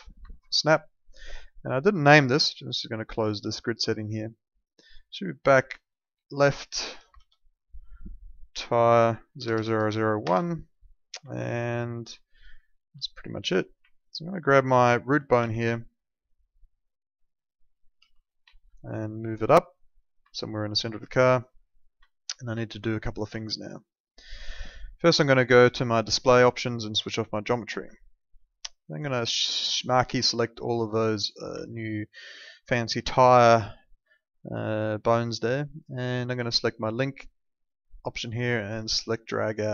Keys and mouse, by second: 0.4 alt+middle click, 2.5 click, 7.1 shift+l, 8.6 click, 9.4 BackSpace, 10.2 Return, 11.3 alt+middle click, 13.0 alt+middle click, 13.9 alt+middle click, 14.3 click, 14.7 alt+middle click, 15.4 w, 15.8 alt+middle click, 17.9 x, 18.5 alt+middle click, 19.3 click, 20.3 alt+middle click, 22.1 alt+middle click, 22.6 alt+middle click, 23.4 alt+middle click, 25.8 click, 27.9 alt+middle click, 28.6 click, 31.7 alt+middle click, 34.1 alt+middle click, 37.5 click.